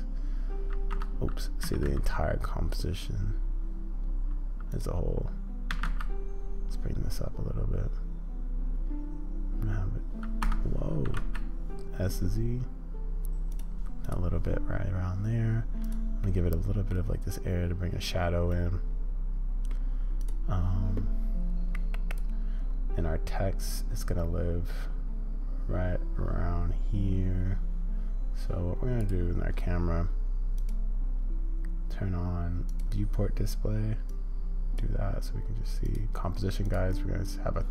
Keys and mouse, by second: 16.2 middle click, 18.5-19.7 middle drag, 32.7 click, 34.1-37.7 drag.